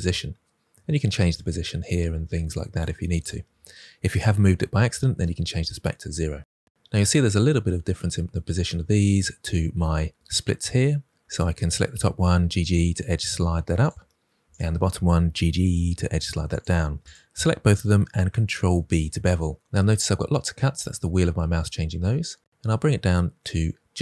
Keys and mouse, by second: 1.4-2.8 drag, 3.2-5.1 drag, 11.2 click, 12.3 g, 12.4 g, 13.7 click, 14.5 click, 15.2 g, 15.4 g, 16.4 click, 17.0 click, 18.5 ctrl+b.